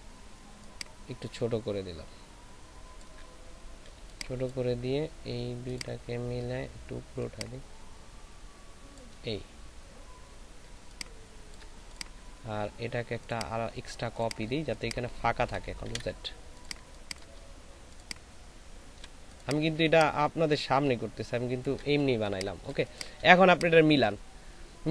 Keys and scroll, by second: 4.0 ctrl+space, 5.3 ctrl+shift+space, 10.6 alt+space, 15.8 ctrl+alt+shift+z, 16.7 ctrl+space, 22.0 ctrl+alt+shift+space.